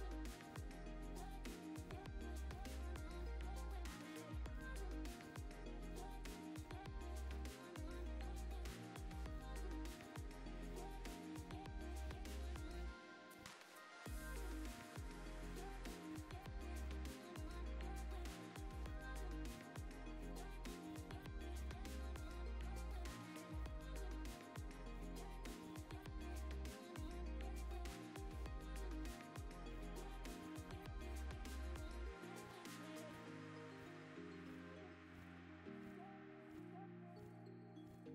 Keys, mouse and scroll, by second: 1.3 click, 1.6 click, 1.8 click, 3.0 click, 3.7 click, 4.0 click, 4.3 click, 4.6 click, 5.6-6.9 drag, 7.3-7.6 scroll down 2, 7.6 drag, 8.0 click, 8.7-9.9 typing, 9.2 click, 9.8 click, 10.3 drag, 11.1 click, 11.4 click, 11.7 drag, 12.5 click, 12.7 shift+d, 12.7 shift+z, 13.5 click, 13.6 g, 13.7 z, 14.1 click, 14.3 scroll up 1, 15.1 click, 15.6 click, 18.8 click, 19.6 click, 19.8 click, 20.2-22.1 typing, 20.8 click, 21.5 click, 22.1 click, 25.3 click, 25.8 click, 31.5-32.2 scroll up 2, 32.2 scroll down 1, 32.4 click, 32.8 scroll down 4, 32.9 click, 33.6-34.1 drag, 34.7-35.5 shift+drag, 35.6-36.3 scroll down 3, 36.3 click, 36.7 click.